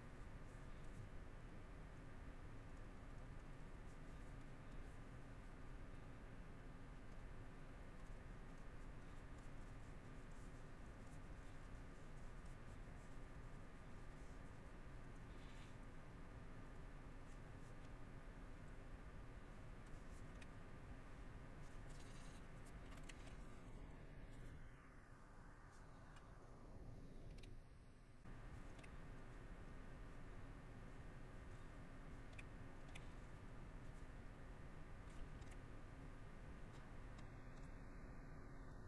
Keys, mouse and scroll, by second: 0.2 middle click, 3.9 middle click, 5.0 middle click, 8.2 middle click, 9.8 middle click, 10.5 middle click, 11.7 middle click, 12.2 middle click, 12.8 middle click, 13.7 middle click, 15.7 middle click, 17.3 middle click, 18.7 middle click, 21.6 middle click, 22.5 middle click, 26.4 middle click, 28.2 middle click, 28.6 middle click, 30.8 middle click, 31.6 middle click, 32.7 middle click, 34.8 middle click, 38.7 middle click.